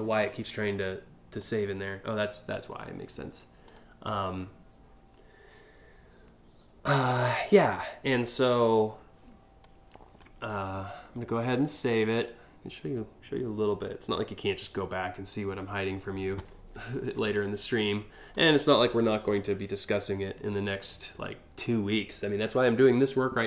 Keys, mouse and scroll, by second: 1.0 click, 3.3 click, 3.7 click, 9.2 click, 11.8-14.7 drag, 17.9-23.4 drag.